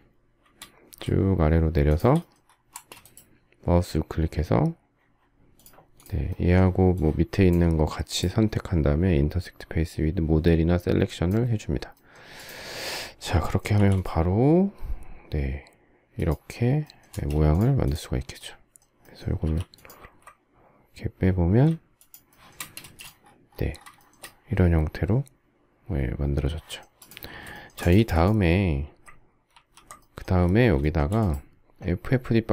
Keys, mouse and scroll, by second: 1.6 shift+click, 2.4 space, 13.5 m, 16.8 space, 19.2 m, 21.7 shift+click, 22.0 shift+middle click, 22.5 shift+double middle click, 22.5 space, 23.7 shift+middle click, 27.3 shift+middle click, 29.2 ctrl+g, 30.5 shift+middle click.